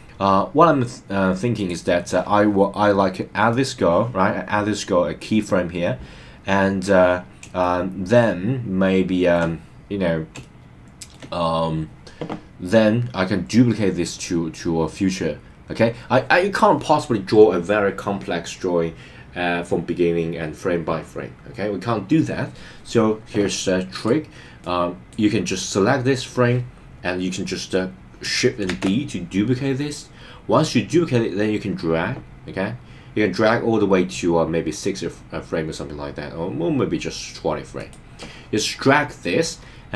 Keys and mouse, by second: 1.5 click, 7.7-9.4 shift+middle drag, 10.5 shift+middle click, 23.9 click, 24.6 click, 24.9 click, 28.6 shift+d, 37.8 click.